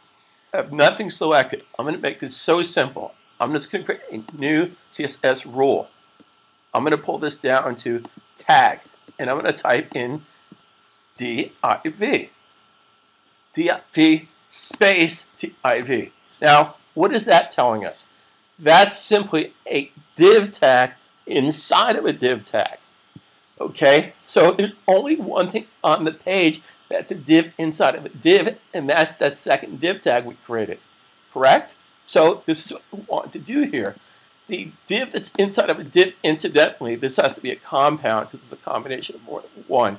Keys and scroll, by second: 11.1-11.8 typing, 15.2-15.8 typing.